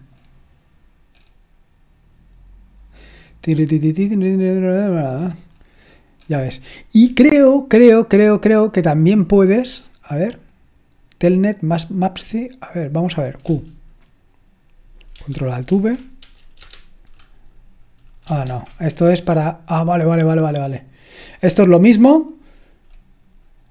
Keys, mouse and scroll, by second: 0.2-1.2 scroll down 1, 1.2-4.2 scroll up 1, 4.9-5.5 scroll up 2, 5.5-6.2 scroll down 2, 6.2-7.4 scroll up 3, 7.4-9.6 scroll down 3, 10.5-12.1 drag, 12.0 right click, 12.2 click, 12.2 right click, 12.8 click, 13.2 click, 13.4 q, 15.7 ctrl+alt+v, 16.6 Return, 18.4 ctrl+c, 22.1-22.8 scroll up 1, 22.8-23.7 scroll up 1.